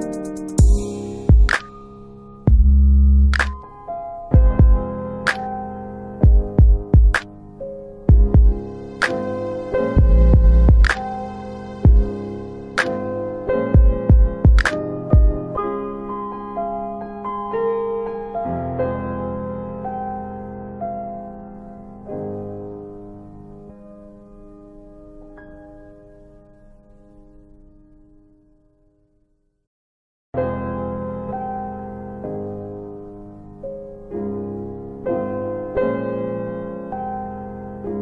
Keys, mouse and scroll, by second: 0.5 click, 1.7 click, 3.7 click, 7.9 click, 11.9 click, 12.0 click, 12.2 click, 13.6 click, 19.8 click, 19.8 click, 21.6 click, 24.0 click, 24.2 click, 25.2 click, 32.5 click, 32.7 click, 34.3 click, 36.0 click, 36.4 alt+right click, 36.7 alt+right click, 37.0 alt+click, 37.3 alt+click, 37.6 alt+middle click, 37.8 alt+middle click.